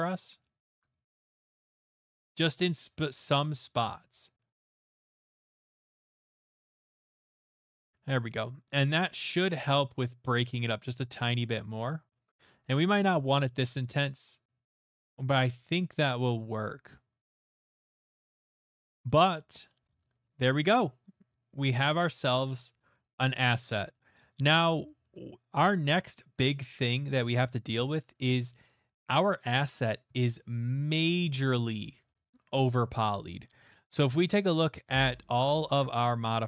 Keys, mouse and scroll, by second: 0.4 click, 0.6 click, 0.9 click, 1.1 click, 1.6 middle click, 1.9 click, 2.1 click, 3.0 click, 3.6 middle click, 4.1 click, 4.4 click, 5.1 middle click, 5.3 click, 5.4 click, 5.8 click, 6.3 right click, 6.7 alt+right click, 6.9 click, 7.0 click, 7.2 click, 11.1 click, 11.9 right click, 11.9 middle click, 12.3 click, 13.0 click, 13.6 click, 13.8 middle click, 17.3 middle click, 17.4 middle click, 17.4 middle click, 17.5 middle click, 17.8 middle click, 17.8 middle click, 17.9 middle click, 19.0 middle click, 19.6 middle click, 19.8 middle click, 19.9 middle click, 20.2 middle click, 25.9 shift+middle click, 26.3 middle click, 28.2 shift+middle click, 29.6 click, 31.3 click, 31.5 scroll, 32.0 shift+middle click, 32.8 middle click, 34.3 click, 36.0 click.